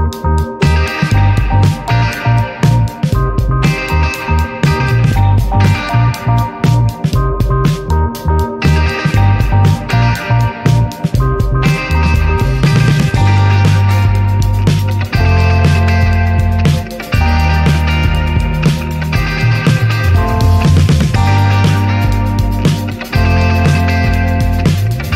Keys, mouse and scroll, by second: 1.4 click, 2.5 click, 3.2 click, 3.7 click, 4.7 drag, 8.1 click, 10.2 click, 11.0 shift+click, 11.3-13.2 right drag, 13.2 click, 14.0 click, 15.2-15.8 scroll down 17, 16.2 alt+z, 16.5-17.0 scroll up 13, 17.1 alt+z, 17.4 click, 17.8 s, 19.3 click, 20.7 click, 21.2 click, 22.8 scroll down 5, 23.0 alt+z, 23.2 Tab, 23.5-23.9 scroll down 6, 23.6 alt+z, 24.0 shift+middle click, 24.1 scroll up 1, 24.2 Tab, 24.5 click, 24.8 scroll down 2, 25.0 shift+middle click.